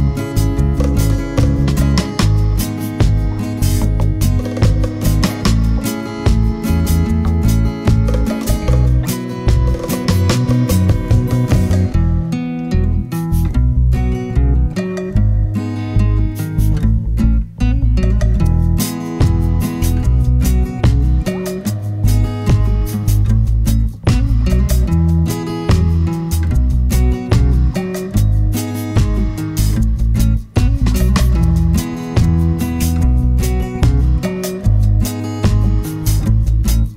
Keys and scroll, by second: 16.8 BackSpace, 30.6 super+d.